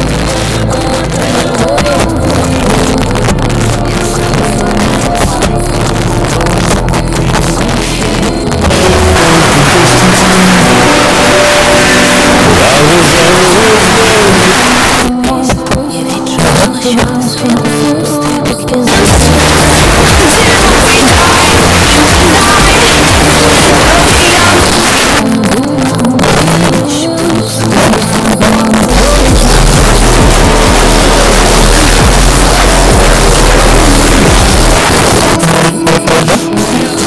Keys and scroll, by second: 14.5 Page_Down, 24.6 Page_Down, 28.4 typing, 34.7 Page_Down.